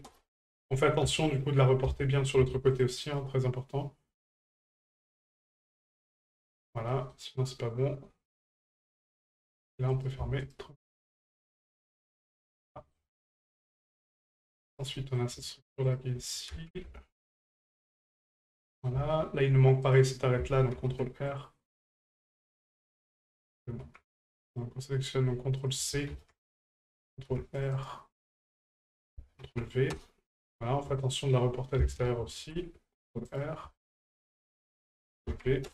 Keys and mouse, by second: 1.2 shift+middle drag, 4.2 click, 4.9-6.1 drag, 6.9 middle drag, 8.7 middle drag, 9.2 shift+middle click, 9.9 right click, 10.4 shift+right click, 11.3 shift+right click, 12.7 middle drag, 13.2 middle click, 14.1 shift+middle drag, 14.7 right click, 14.9 middle drag, 15.8 shift+right click, 17.2 shift+right click, 18.5 middle drag, 19.1 shift+middle drag, 19.9 right click, 24.5 right click, 25.8 ctrl+click, 28.9-30.0 ctrl+drag, 30.9-31.4 shift+middle drag, 33.7 shift+middle click, 34.8-35.7 ctrl+drag.